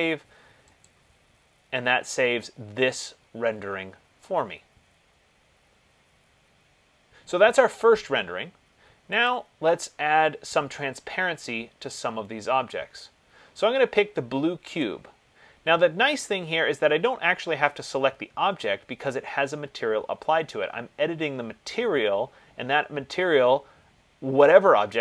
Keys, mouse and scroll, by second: 1.1 click, 9.5 click, 13.1 click, 15.0 click.